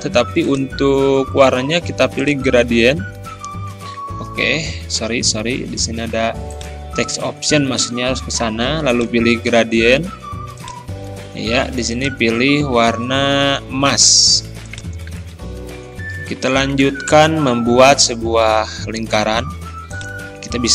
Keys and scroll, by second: 4.3 ctrl+z.